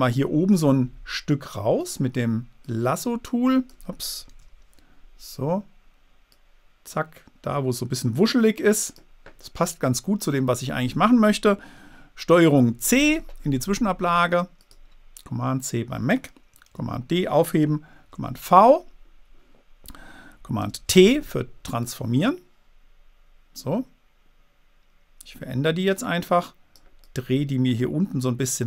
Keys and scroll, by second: 6.7 super+d, 13.1 super+c, 17.1 super+d, 18.4 super+v, 21.0 super+t.